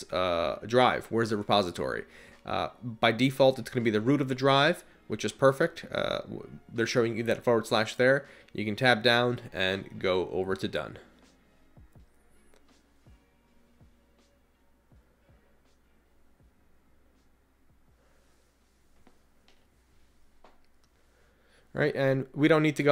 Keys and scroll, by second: 8.7 Down, 9.0 Down, 9.6 Right, 10.2 Right, 15.1 Left, 15.4 Right, 18.1 Return, 21.5 Return.